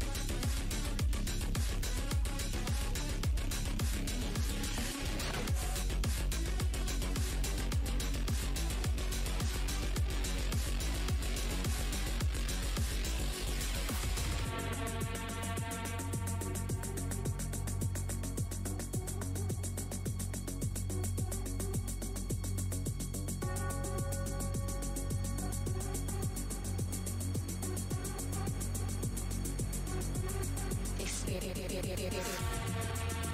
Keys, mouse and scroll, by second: 4.4 alt+click, 8.9 click, 10.8-12.8 scroll down 1, 13.4 click, 14.3 right click, 14.9 alt+w, 15.2-15.6 alt+scroll up 2, 15.4 w, 17.3 r, 17.8 space, 18.8-20.4 typing, 18.9 alt+scroll up 1, 22.5 shift+v, 25.5 r, 26.3 w, 26.8 click, 26.9 w, 27.3 shift+v, 28.8 shift+x, 29.7 click, 31.6 w.